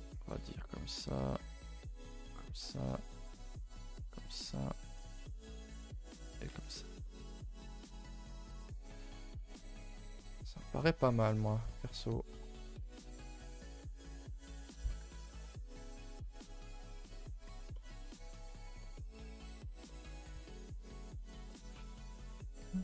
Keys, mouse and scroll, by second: 0.7 click, 1.3 g, 2.8 click, 3.0 g, 4.4 click, 4.9 g, 6.4 z, 7.0-8.8 middle drag, 8.8-9.2 scroll down 3, 9.2 Tab, 9.5 middle drag, 9.6-10.1 scroll down 2, 9.8 a, 10.1 middle drag, 10.4 middle drag, 10.7 scroll up 2, 10.8 Tab, 11.0-12.6 middle drag, 12.6 scroll up 2, 12.9 1, 13.1 middle click, 13.4-13.7 scroll up 2, 13.7 middle click, 14.7 click, 14.9 g, 15.4 click, 15.5 g, 16.1-17.4 middle drag, 17.4 click, 17.7 middle click, 18.5 click, 18.8 middle click, 19.1 g, 19.8 middle click, 20.7 click, 20.9 g, 21.4 middle click, 22.2 click, 22.5 middle click.